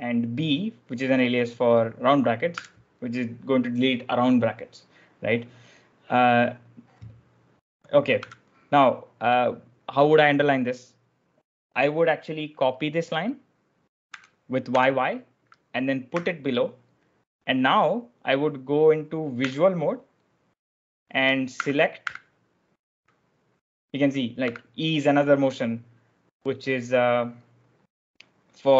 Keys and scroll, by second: 5.3 b, 8.1 b, 14.0 y, 14.6 y, 16.0 p, 21.2-22.4 typing, 24.3 e.